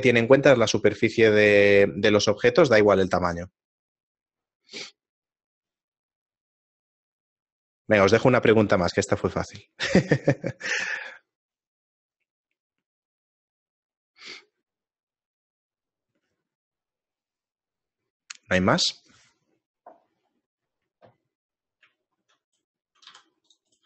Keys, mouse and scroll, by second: 21.5 middle click, 22.0 shift+middle click, 23.3 right click, 23.3 x.